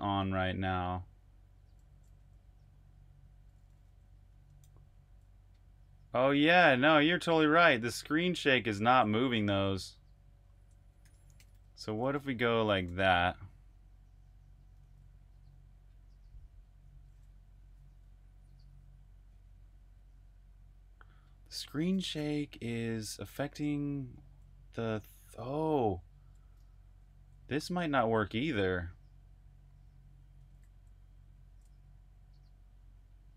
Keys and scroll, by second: 0.0-9.0 typing, 9.1 super+q, 10.5-12.9 typing, 14.3-15.7 typing, 25.0-27.1 typing, 30.0-32.1 typing.